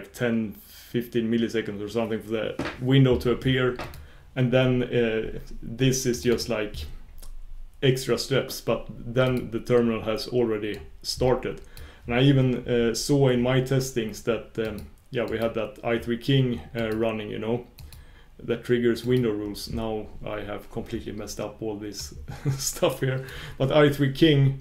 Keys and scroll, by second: 22.0 super+q.